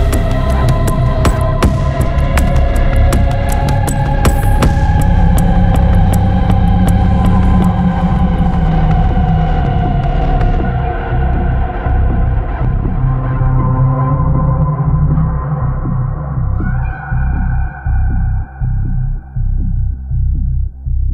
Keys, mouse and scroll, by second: 0.5 1, 1.8 2, 3.2 3, 4.3 4, 5.1-5.4 scroll down 2, 5.8 scroll up 2, 6.2 5, 6.6-6.9 scroll down 2, 7.1-7.5 scroll up 1, 8.0 0, 8.5 scroll down 1, 9.1-10.2 scroll up 3, 11.0 scroll down 2, 12.7 1, 13.4-13.7 scroll down 2, 14.0-14.4 scroll up 2, 14.6 scroll down 1, 16.4 click, 18.4-21.1 drag.